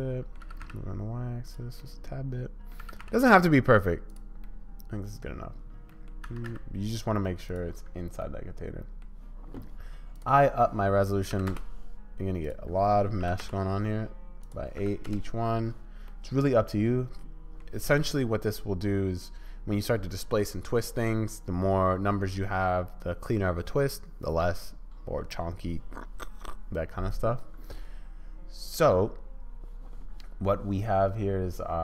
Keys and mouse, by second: 0.6 g, 1.8 middle click, 2.8 g, 4.4-5.2 middle drag, 6.0 click, 6.3 s, 8.3-8.7 drag, 9.0-10.1 middle drag, 10.1-12.2 drag, 12.2 middle click, 12.4-14.0 drag, 14.0 middle click, 14.5-15.6 drag, 16.1-17.6 middle drag.